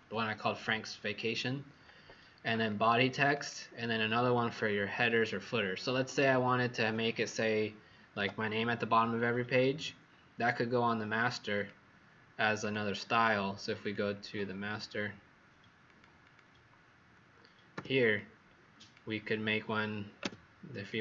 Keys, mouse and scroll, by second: 2.6 click, 8.1 Escape, 11.5 click, 16.2 click, 17.6 z, 18.1 click, 20.1 v, 20.8 click.